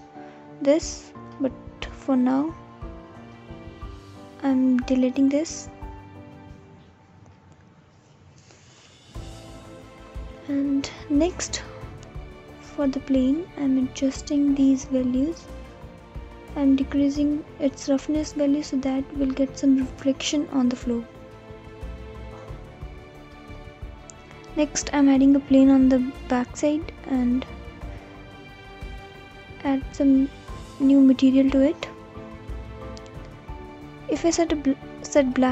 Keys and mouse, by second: 0.3-1.6 alt+drag, 5.2 Delete, 6.5-7.4 drag, 12.8 click, 14.8 click, 15.7-17.0 right drag, 17.0-19.6 drag, 21.8 click, 23.5 click, 24.1 g, 24.5 y, 29.1 right click, 29.9 right click, 31.0-32.2 drag.